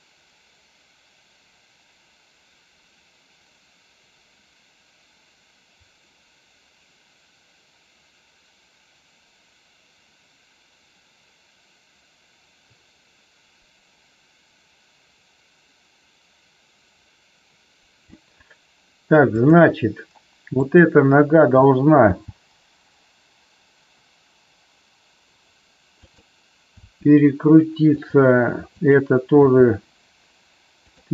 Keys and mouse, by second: 19.4 click, 20.6 click, 22.0 g, 26.0 click, 26.8 r, 28.6 click, 29.4 r, 30.8 click.